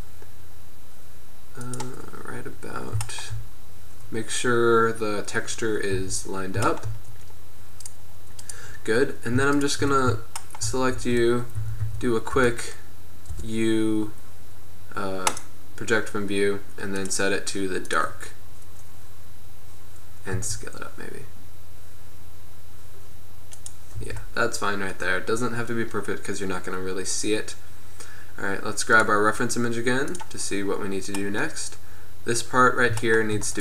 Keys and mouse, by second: 6.4 Tab, 6.8 middle click, 11.1 Tab, 11.7 a, 11.9 a, 12.5 y, 13.4 u, 17.1-18.7 drag, 19.2-20.6 middle drag, 20.6 s, 24.2 Tab, 29.0-30.7 drag, 30.7-33.6 middle drag.